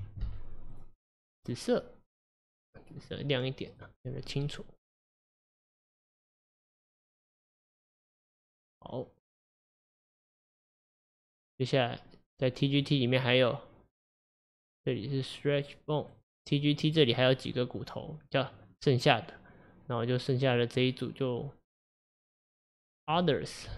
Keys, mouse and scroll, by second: 1.1-4.5 drag, 4.5-7.5 middle drag, 9.5 click, 9.8 click, 10.3 click, 10.9-13.9 drag, 14.2 click, 16.1 click, 16.9 drag, 22.5 click, 23.3-23.7 drag.